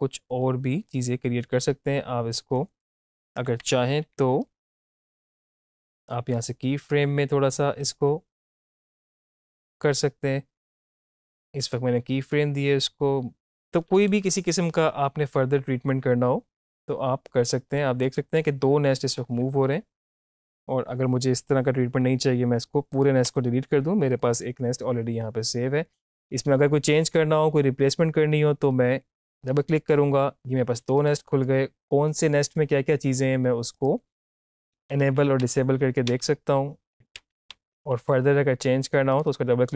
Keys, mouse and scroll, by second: 3.4 Up, 3.9 =, 4.1 =, 4.8 =, 4.9 click, 8.1 space, 8.8 click, 10.5 space, 11.2-20.4 drag, 22.9 click, 29.3 click, 34.8 click, 35.4 shift+click, 36.9 click, 37.2 shift+`, 39.2 click.